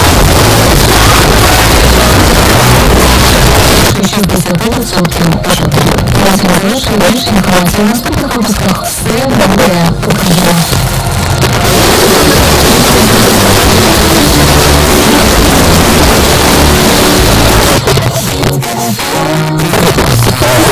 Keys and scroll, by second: 3.9 Page_Down, 17.6 Page_Down.